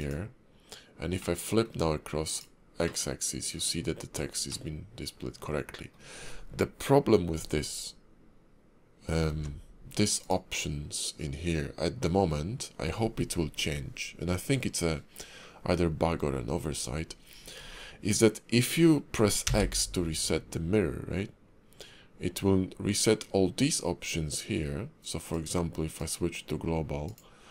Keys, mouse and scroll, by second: 1.3 middle click, 2.4 click, 3.0 middle click, 4.6 middle click, 7.9-9.1 scroll up 2, 9.3 alt+x, 10.2 click, 25.3 click.